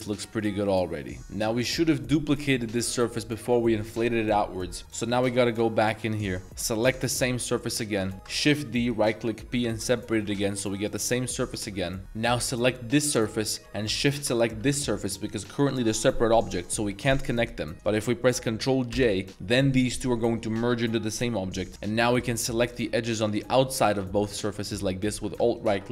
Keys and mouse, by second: 0.4 Tab, 0.4-1.2 middle drag, 1.2 ctrl+z, 4.3 middle click, 4.8 Tab, 4.8 click, 5.0 middle drag, 5.2 Tab, 5.4 shift+middle drag, 5.8 z, 6.2 z, 6.4 3, 6.5 click, 6.8 middle click, 7.9 ctrl+shift+click, 8.0 z, 8.3 shift+d, 9.5 p, 10.1 Tab, 10.3 z, 11.0 Tab, 11.3 middle drag, 11.8 middle drag, 11.8 a, 13.6 g, 14.0 shift+click, 14.6 g, 18.9 ctrl+j, 21.7 Tab, 21.7 alt+middle click, 21.7 z, 21.8 alt+click, 21.9-22.6 alt+shift+middle drag, 22.6 alt+shift+click, 23.2 alt+shift+click, 23.5 middle click, 23.8 alt+shift+click, 25.0 alt+shift+click, 25.5 alt+shift+click.